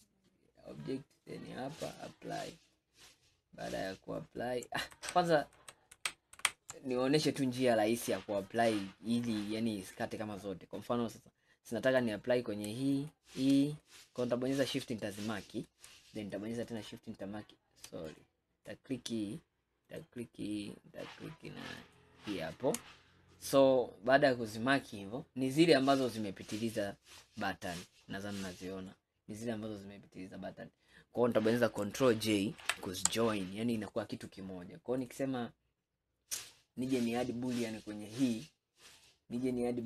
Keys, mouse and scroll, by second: 1.2-2.8 drag, 2.8-5.1 middle drag, 5.1 ctrl+z, 5.7 ctrl+z, 6.5 ctrl+z, 7.8-8.6 scroll down 2, 8.8-12.0 middle drag, 12.0 click, 13.0 shift+click, 13.9-16.7 middle drag, 16.7 shift+click, 18.1 click, 19.9 shift+click, 21.8 shift+click, 26.1 click, 26.6-27.6 middle drag, 27.6 scroll up 2, 29.0-32.0 middle drag, 32.7 ctrl+j, 33.5 scroll down 2, 34.0 scroll up 2, 35.7-36.5 drag, 39.0 click.